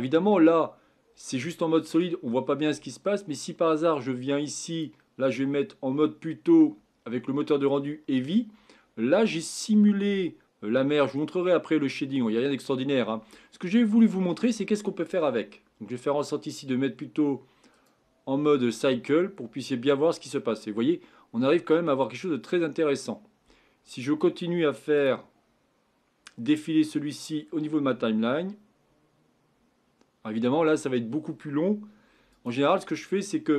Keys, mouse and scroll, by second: 0.0 click, 0.0-2.3 middle drag, 2.3-4.8 scroll down 2, 4.8-5.7 drag, 8.7-9.9 scroll up 5, 11.4-12.7 scroll down 4, 12.7-15.7 middle drag, 17.9 Left, 22.1 scroll up 5, 24.9 click, 32.8-33.5 drag.